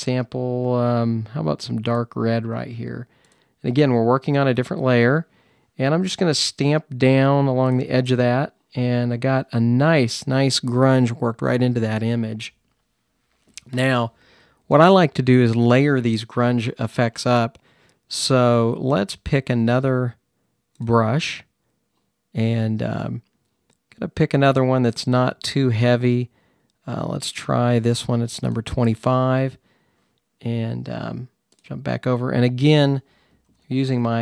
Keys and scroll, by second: 33.4-34.2 typing.